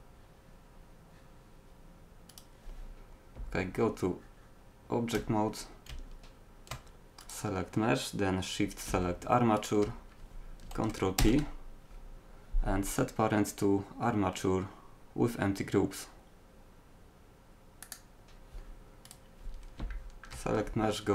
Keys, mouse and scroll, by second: 3.2 middle click, 3.4 Tab, 5.9 z, 7.2-8.7 right drag, 11.2 ctrl+p, 19.1 right click, 19.9 middle click, 20.7 Tab.